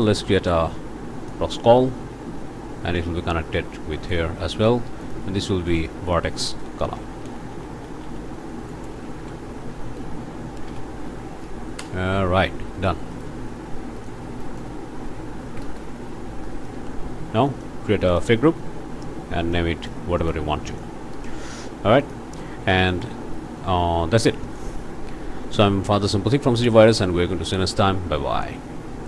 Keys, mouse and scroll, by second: 0.0-1.5 drag, 3.0-4.3 drag, 5.0 click, 5.7 click, 6.9-8.7 typing, 10.6-11.3 typing, 11.8 shift+Return, 13.1 click, 14.0 click, 14.4 click, 15.5 Delete, 15.6 Return, 16.4 click, 16.7 Tab, 17.1 scroll up 2, 17.5 click, 18.1 click, 19.5 click, 20.2 click, 20.7 click, 22.0 click, 22.3 scroll down 1, 22.7 ctrl+middle click, 23.1 ctrl+space, 23.1 ctrl+click, 29.0 click.